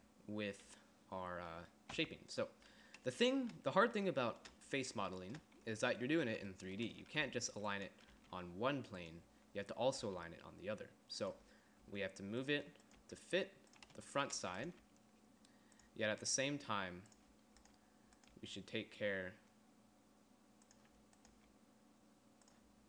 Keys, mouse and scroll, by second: 0.1 z, 2.2 g, 7.5 g, 8.4 g, 10.3 g, 12.1 g, 13.2 g, 15.0 g, 16.6 g, 17.9 g, 18.6 g, 21.6 g.